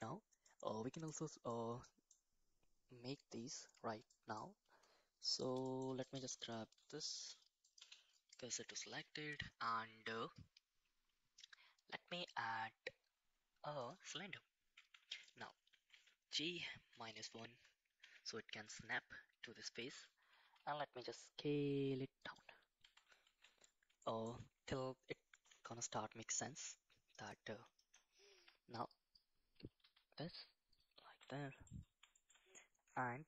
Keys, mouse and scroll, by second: 0.5 middle click, 1.6 middle click, 4.1 middle click, 5.2 middle click, 5.6 shift+middle click, 6.0 click, 6.2 Tab, 6.5 click, 7.2 shift+s, 7.8 Tab, 8.3 middle drag, 8.8 shift+a, 14.8 Tab, 15.7 g, 18.0 Tab, 18.6 middle click, 19.6 middle click, 20.4 s, 22.8 KP_1, 23.3 shift+z, 24.0 shift+middle drag, 25.3 g, 27.8 shift+middle click, 28.3 Tab, 29.0 click, 29.8 s, 31.1 shift+z, 31.3 middle click, 32.2 shift+middle click.